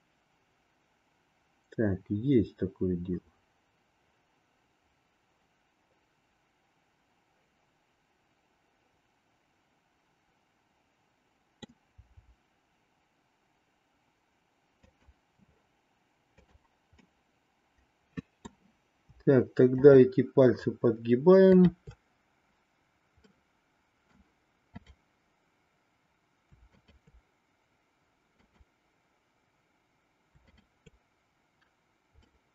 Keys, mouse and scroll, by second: 12.0 r, 17.0-18.6 middle drag, 21.4-22.8 shift+drag, 23.2-24.2 middle drag, 26.8-28.0 shift+drag, 28.4-29.7 drag, 30.4-31.8 shift+drag, 32.3-32.5 middle drag.